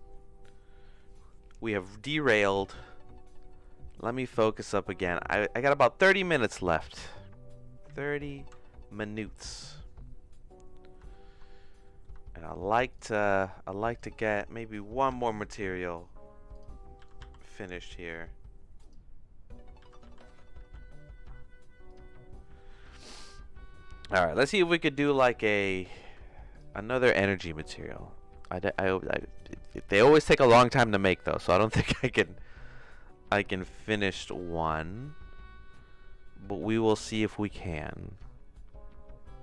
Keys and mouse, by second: 4.0 click, 5.3 middle click, 7.8 z, 10.8 middle click, 11.1 shift+middle click, 11.8 middle click, 15.1 g, 17.1 g, 19.9 g.